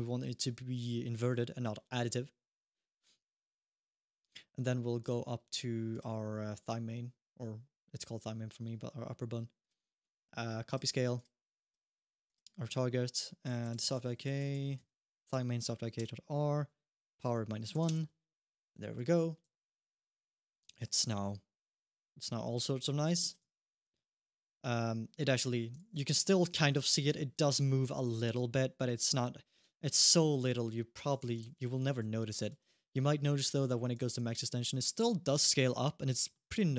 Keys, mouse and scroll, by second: 4.8 click, 5.7 click, 9.4 click, 10.9 click, 12.0 click, 14.3 Down, 14.4 Down, 16.9 click, 18.7 click, 19.2 g, 20.6 middle click, 20.8 g, 23.3 shift+middle click, 23.6 alt+g, 23.8 scroll up 2, 25.2 middle click, 25.5 g, 26.1 middle click, 26.5 alt+g, 27.7 g, 31.2 alt+g, 32.3 g, 32.6 scroll down 1, 32.9 alt+g, 33.3 middle click, 33.8 g, 36.1 middle click, 36.4 alt+g.